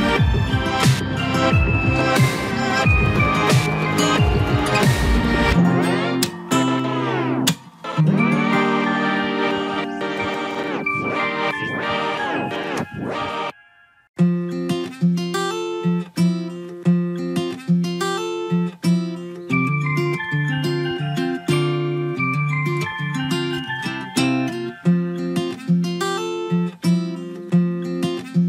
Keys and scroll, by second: 16.7 ctrl+g.